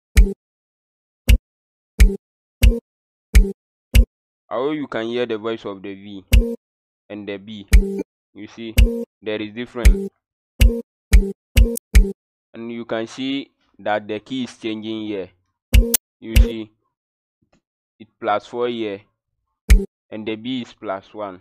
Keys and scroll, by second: 0.1 b, 1.2-3.9 typing, 6.2 v, 7.8 b, 8.7 v, 9.8-12.4 typing, 15.7 v, 16.3 v, 19.6 b.